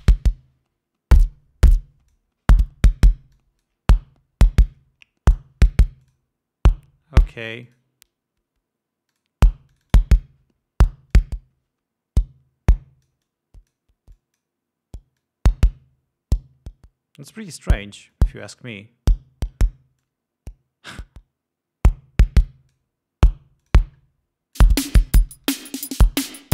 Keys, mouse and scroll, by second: 0.3-2.7 drag, 3.7-4.2 drag, 5.7-6.7 drag, 8.0 click, 9.5 click, 10.1 click, 11.5-14.3 drag, 14.5-15.0 drag, 15.6-18.1 drag, 18.5 click, 20.4-23.3 drag, 24.0-24.8 drag, 25.0 click.